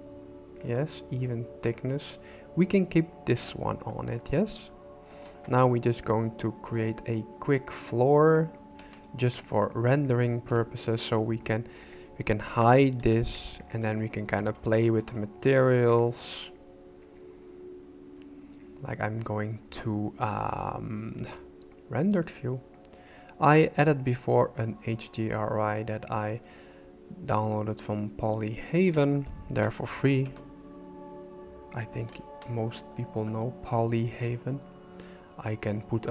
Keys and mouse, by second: 1.6 click, 3.5 shift+middle click, 5.3 shift+a, 8.3 middle click, 8.8 s, 9.7 middle click, 10.5 KP_5, 11.2 middle click, 12.3 shift+middle click, 13.0 h, 14.7 shift+middle click, 18.5 click, 21.7-22.8 middle drag, 29.1 shift+middle click, 30.2 m, 31.9 n.